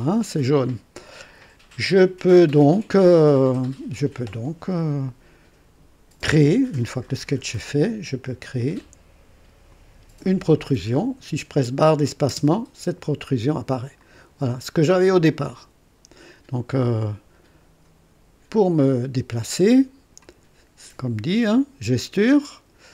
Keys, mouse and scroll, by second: 9.7 click, 12.2 space, 14.0 click, 15.1-20.3 drag.